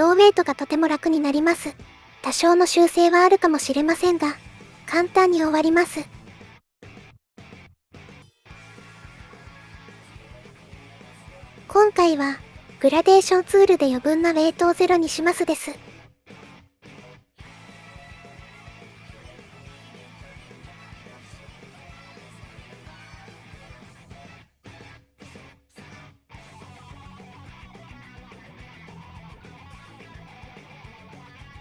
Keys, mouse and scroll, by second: 0.1-1.2 drag, 3.1 click, 4.6 click, 5.5 middle click, 5.9 shift+middle click, 6.2 middle click, 7.2 middle click, 7.5 middle click, 7.9 shift+middle click, 8.2 middle click, 8.5 middle click, 9.0 middle click, 10.4-11.4 drag, 12.2 middle click, 12.5 click, 13.2 middle click, 13.6 click, 14.2 click, 14.6 middle click, 14.9 middle click, 15.2 middle click, 15.5 click, 16.1 middle click, 16.3 middle click, 16.6 click, 17.5 middle click, 17.8 middle click, 18.2 middle click, 18.4 click, 18.7 middle click, 19.0 middle click, 19.1-20.1 drag, 20.2 middle click, 20.4 middle click, 21.3 click, 21.6 middle click, 21.8 middle click, 21.9 click, 22.6 middle click, 22.8 middle click, 22.9 middle click, 23.2 middle click, 25.8 middle click, 26.9 middle click, 27.3 click, 27.7 click, 27.9 click, 28.2 middle click, 28.4 click, 28.8 click, 29.0 click, 29.2 click, 29.4 click, 29.7 click, 30.0 click, 30.4 click, 30.6 middle click, 31.0 middle click, 31.2-31.6 drag.